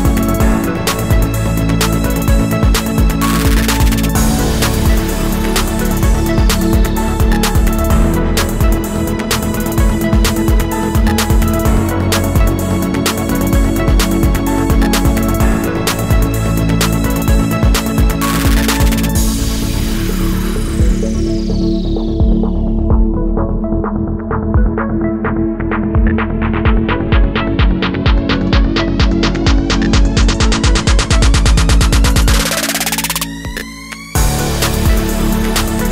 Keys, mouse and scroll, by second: 2.1 alt+scroll up 1, 2.3 space, 2.8 alt+scroll up 1, 4.8 alt+click, 7.6 space, 9.3 Delete, 11.7 alt+click, 14.1 ctrl+shift+a, 16.1 alt+shift+click, 18.8 ctrl+shift+a, 19.1 space, 19.8 alt+click, 21.5 alt+shift+click, 22.9 alt+shift+click, 23.8 ctrl+shift+a, 24.1 space, 25.1 alt+click, 27.1 alt+shift+click, 28.4 ctrl+shift+a, 29.1 alt+scroll up 1, 31.1 alt+click, 33.6 ctrl+shift+a, 34.6 alt+click.